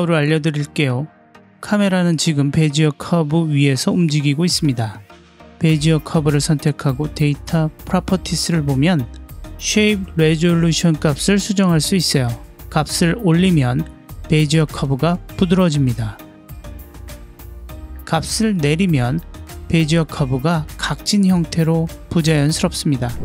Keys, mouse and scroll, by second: 0.9 space, 2.4 click, 6.5 click, 7.6-15.5 drag, 18.0-20.0 drag, 20.4-23.2 drag.